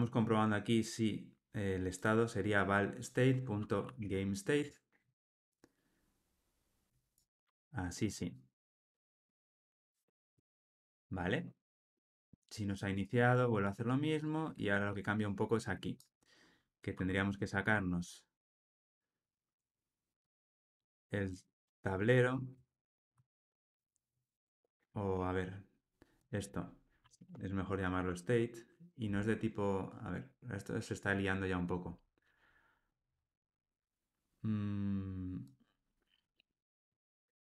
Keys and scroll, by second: 4.6 Tab, 10.5 alt+super+l, 10.7 ctrl+alt+o, 20.1 Tab, 22.4 Tab, 26.5 Escape.